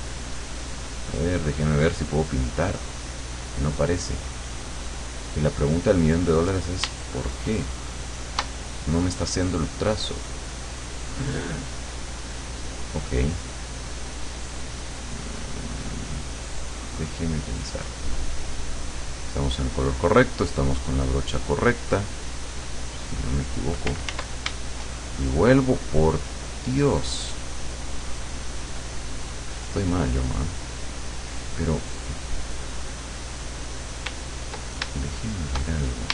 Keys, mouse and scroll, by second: 7.1-8.6 shift+drag, 13.0 click, 14.2 click, 17.9 click, 19.4 click, 19.9 click, 22.6 click, 23.2 click, 24.2 ctrl+z, 26.1 click, 27.0 click, 27.8 click, 29.1 click, 32.2-34.1 drag, 35.0 ctrl+shift+click.